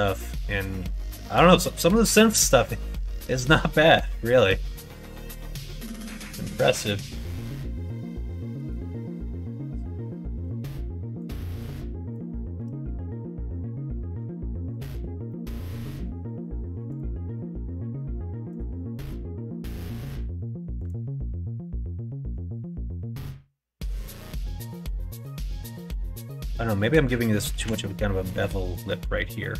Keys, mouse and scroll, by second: 0.6 scroll down 1, 1.9 scroll up 1, 1.9 middle click, 2.3 scroll down 1, 2.5 scroll up 1, 2.8 scroll down 1, 3.1 middle click, 3.7 scroll down 1, 7.8 scroll up 1, 7.8 middle click, 8.2 shift+middle click, 9.5 middle click, 10.4 alt+z, 11.1 click, 15.2 middle click, 20.7 click, 25.0 middle click, 27.4 alt+z, 28.6 click, 29.2-29.5 middle drag.